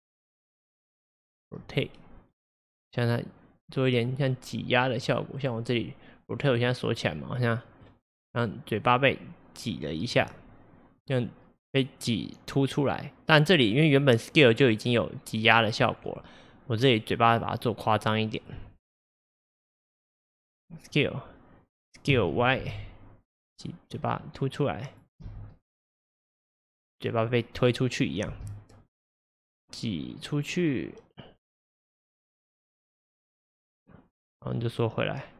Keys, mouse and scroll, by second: 2.6 click, 5.1 click, 6.4-8.0 drag, 11.1-14.1 drag, 22.2 s, 25.3 space, 28.9-31.9 drag.